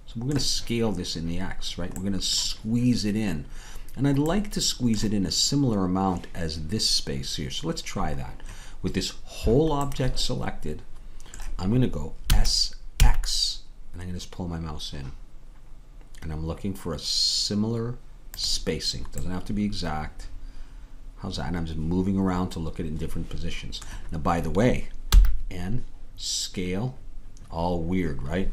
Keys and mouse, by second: 9.9-12.3 middle drag, 12.3 s, 19.3-21.2 middle drag, 21.7 middle click, 25.2 n.